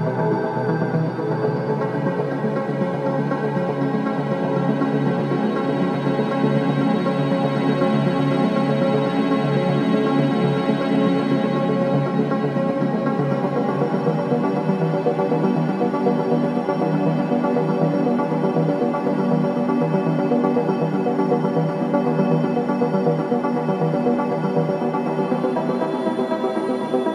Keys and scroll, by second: 9.3 ctrl+z, 14.8 x, 22.3 space.